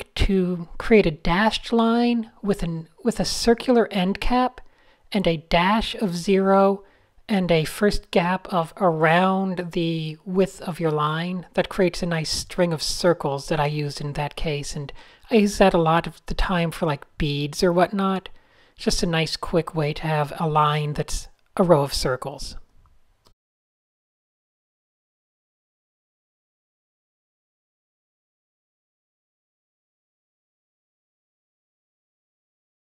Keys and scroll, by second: 0.1 super+0, 2.2-2.6 typing, 5.3 a, 6.8 e, 7.6 shift+super+a, 7.9 p, 11.0 a, 11.3 shift+super+}, 11.7 shift+super+}, 12.2 shift+super+}, 13.2 alt+shift+super+h, 13.6 a, 14.4 super+h, 16.0 super+space, 16.1 super+space, 17.2 super+,, 23.7 shift+f, 24.7 a, 25.1 super+0, 25.5 alt+shift+super+h, 25.7-27.5 typing, 28.3 super+z, 29.2 super+z, 31.1 super+z, 31.7 super+z, 32.3 super+space, 32.4 super+Tab, 32.5 super+z, 32.8 super+f.